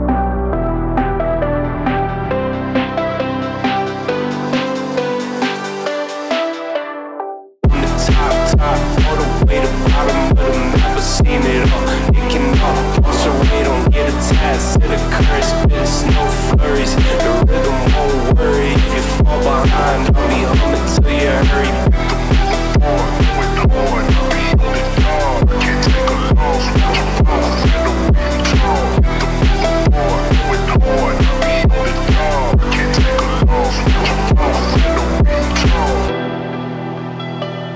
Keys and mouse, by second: 1.1 x, 3.5 1, 3.8 2, 3.9 click, 4.2 x, 5.6 click, 6.2 shift+click, 6.7 middle click, 7.8-9.8 drag, 10.6 1, 11.6-12.8 drag, 13.4-15.5 middle drag, 15.6 Tab, 16.3 middle click, 16.5 click, 17.2-18.8 middle drag, 19.5 Tab, 19.7 middle click, 20.4 click, 21.2 click, 22.5 click, 23.4 middle click, 24.6 click, 25.3 click, 25.7 click, 28.3 click, 29.7-31.6 middle drag, 32.3 click, 33.2 click, 35.8 click, 36.1 g, 37.2 click, 37.4 g.